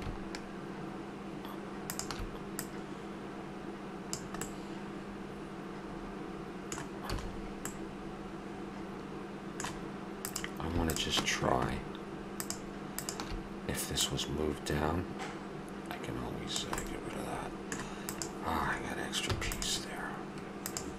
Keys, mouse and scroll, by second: 2.5 click, 4.6-5.1 middle drag, 6.3-7.7 middle drag, 7.1 a, 8.1-9.8 middle drag, 10.2-15.6 drag, 16.8-17.2 middle drag, 18.1 right click, 19.3-19.9 drag, 19.3 x, 20.6 right click.